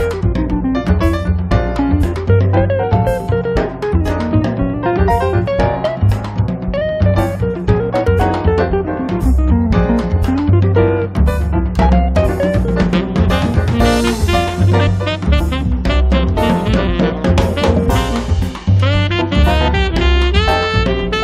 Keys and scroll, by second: 1.7 m, 4.4 space, 7.3 f, 9.1 1, 9.4 Return, 9.9 space, 16.8 Escape, 17.8 Delete.